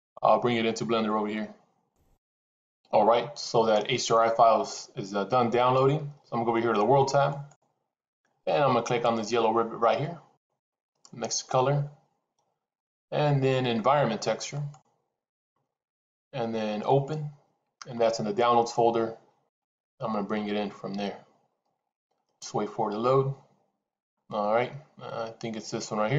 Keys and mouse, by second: 7.3 click, 10.4-15.2 drag.